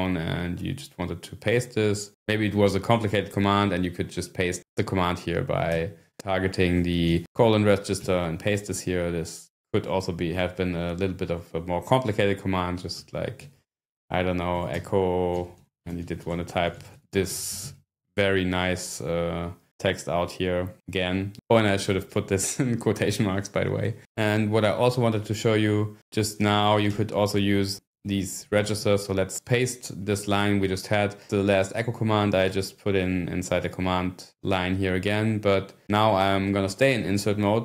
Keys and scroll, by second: 5.7 ↺, 6.2 ", 7.0 :, 8.0 p, 13.4-15.6 typing, 17.2-18.0 typing, 18.7 Return, 27.0-28.8 typing, 30.1 Return, 30.4 Up.